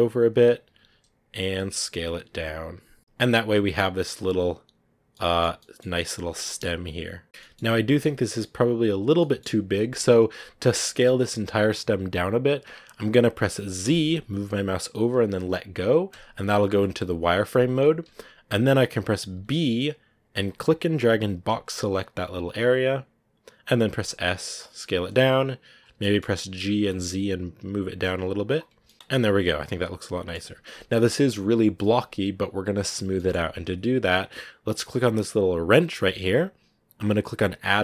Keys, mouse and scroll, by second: 4.9-5.4 scroll down 3, 5.0 middle click, 5.5 middle click, 5.8 scroll up 1, 5.8 middle click, 6.1 s, 6.4 scroll down 1, 6.5-8.4 middle drag, 8.4 scroll up 1, 9.1 middle click, 9.3-9.6 scroll down 1, 25.8 scroll down 1, 25.9 middle click, 26.4 g, 28.6 Tab, 28.7 middle click, 28.9 z, 29.0-32.3 middle drag, 32.3 scroll up 1, 33.0-35.6 middle drag, 35.6 click.